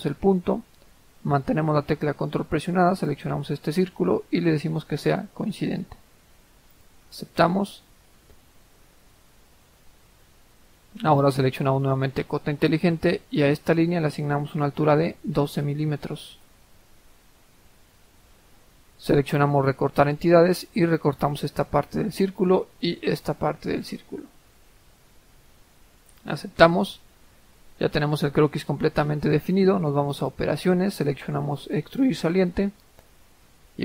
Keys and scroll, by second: 15.4-15.7 typing, 16.3 Return, 17.8 Escape, 22.5-23.3 typing.